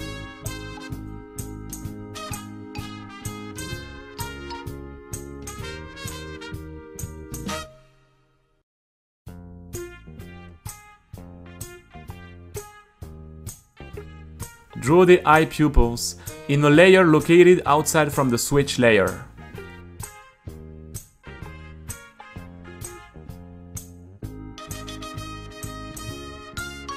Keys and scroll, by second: 0.0-1.5 typing, 0.8 Return, 1.6 super+v, 3.2-4.2 typing, 6.2-7.5 typing, 13.9-16.4 typing, 19.4 u, 20.1 space, 21.2 Return.